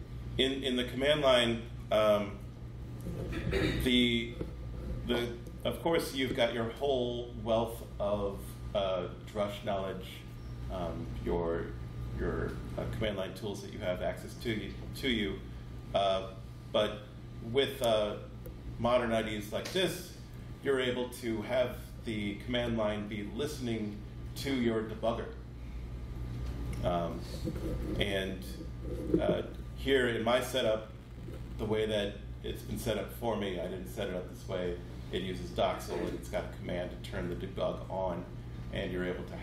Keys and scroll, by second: 0.7 ctrl+F12, 2.2 alt+F12.